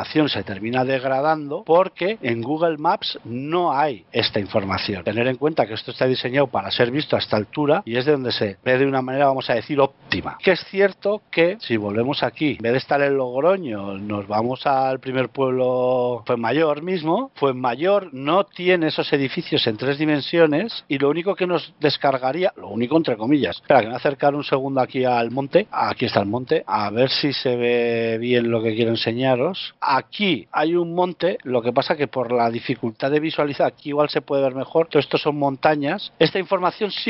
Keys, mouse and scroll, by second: 0.0-0.4 scroll up 1, 0.4 middle click, 3.9-4.7 scroll down 4, 4.7-5.1 scroll down 4, 5.1 shift+middle click, 5.7-6.5 scroll down 1, 6.5-7.5 scroll down 1, 7.5 shift+middle click, 9.6 shift+middle click, 9.6 shift+scroll down 1.